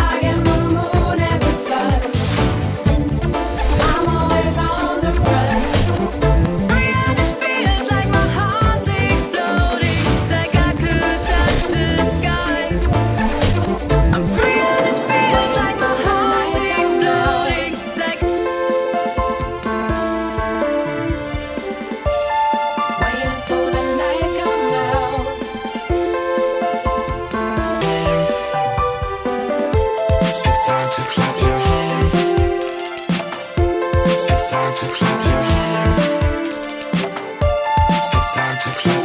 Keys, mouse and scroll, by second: 0.8 typing, 0.9 click, 1.0-1.4 scroll down 1, 1.4-1.8 drag, 2.7 click, 4.9 click, 7.2 click, 12.2 click, 13.5 click, 13.7 click, 14.3 click, 15.6 click, 17.2-17.9 drag, 19.7 click, 24.0 right click, 25.5 alt+click, 27.6 alt+click, 28.1 alt+click, 28.7 alt+click, 30.2 click, 30.4 click, 32.8 alt+click, 35.0 click, 36.0 alt+click, 38.1 alt+click, 38.6-39.0 alt+drag.